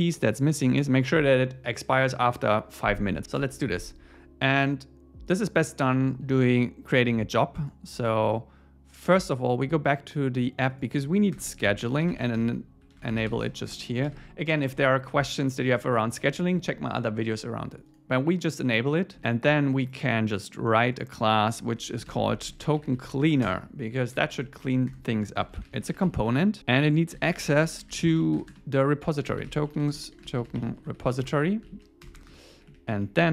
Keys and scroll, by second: 3.4 Return, 11.4 Return, 11.6 alt+l, 13.7 Return, 14.1 super+s, 19.1 super+1, 23.5 Return, 24.1 super+1, 24.7 Up, 24.9 Return, 25.4 alt+l, 26.5 Left, 31.2 Return, 31.7 super+Right, 32.0 Return, 32.5 Up, 32.9 Down.